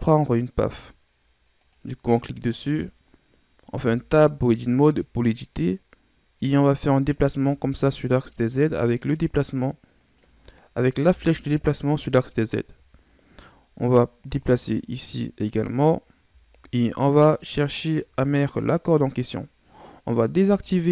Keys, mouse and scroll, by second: 3.6 Tab, 4.6 click, 7.5 ctrl+z, 8.6-11.1 drag, 11.1 KP_7, 12.4-13.9 scroll up 5, 13.9-17.0 drag, 20.4 o.